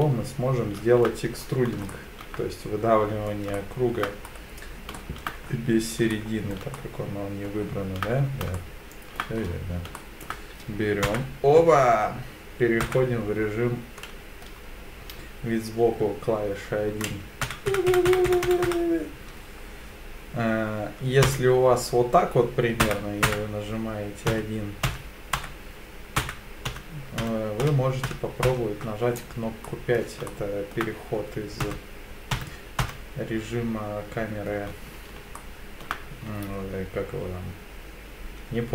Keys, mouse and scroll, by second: 1.4-1.7 scroll down 3, 1.9-3.3 shift+middle drag, 3.6 shift+middle click, 4.2-4.9 scroll up 3, 5.0 shift+middle click, 5.5-6.0 scroll up 2, 6.1 shift+middle click, 6.8 shift+middle click, 8.2-8.6 scroll down 3, 8.6 shift+middle click, 9.4-9.8 scroll down 2, 10.0 shift+middle click, 11.1 KP_1, 12.8 KP_1, 17.4-18.7 typing, 21.3 KP_5, 22.8 KP_1, 23.3 KP_1, 24.3-28.4 typing, 25.4 Right, 29.2 right click, 29.7 middle click, 30.3 shift+middle click, 31.6 KP_5, 32.3 KP_5, 33.3 KP_5, 35.4 shift+middle click.